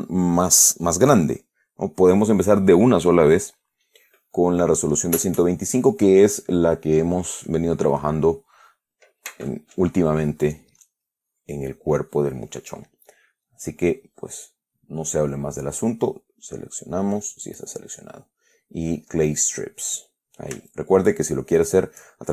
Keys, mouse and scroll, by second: 13.6 click, 14.0-16.7 middle drag, 16.7 right click, 17.9 click, 19.2 click, 20.1 click, 21.1 shift+click, 21.9 shift+click.